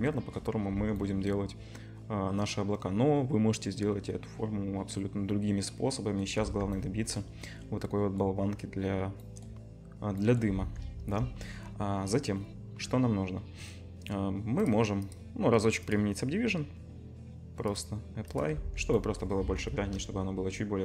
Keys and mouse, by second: 0.7 Tab, 6.4 Tab, 7.3-9.5 drag, 10.5 Tab, 10.5-13.6 drag, 11.0 KP_0, 14.0 click, 14.7 middle click, 15.2-19.3 drag, 18.6 Tab, 19.4 Tab, 19.8 KP_0.